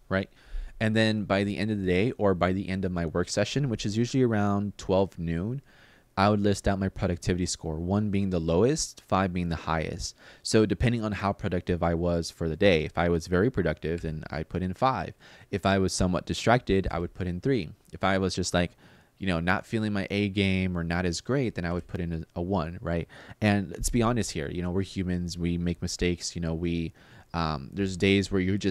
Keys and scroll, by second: 13.7 5, 16.6 3, 21.4 1.